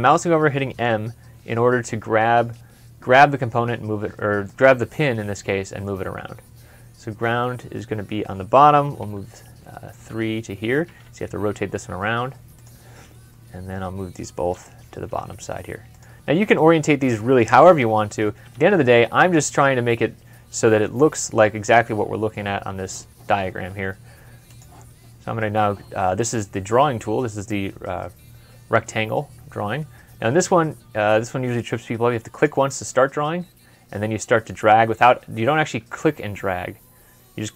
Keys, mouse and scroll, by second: 0.0 m, 0.7 m, 5.2 typing, 8.9 typing, 10.7 typing, 14.1-15.0 typing, 17.6-18.4 typing.